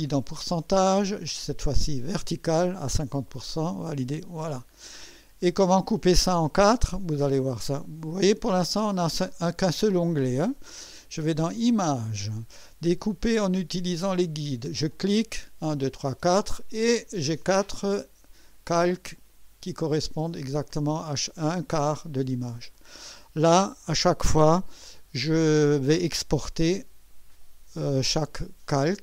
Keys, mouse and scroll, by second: 0.2 click, 1.2 click, 2.2 click, 3.6 click, 11.7 click, 15.0 click, 17.7 click, 19.2 click, 19.8 click, 20.4 click, 21.2 click.